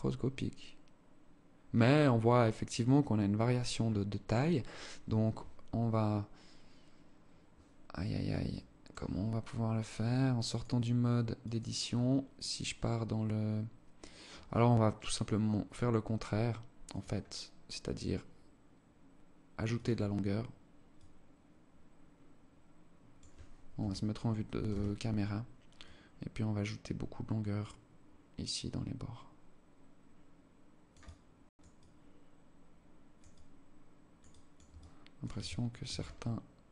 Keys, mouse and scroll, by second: 4.5 Escape, 7.9 click, 10.0 click, 11.0 click, 14.4 click, 15.7 click, 19.2 click, 19.6-20.0 scroll down 2, 20.4 click, 23.2 KP_1, 24.1 KP_0, 25.3 click, 30.5 click, 31.2 click, 33.6 click, 34.1 alt+click, 34.8 alt+shift+click, 35.5 scroll up 3, 36.1 click.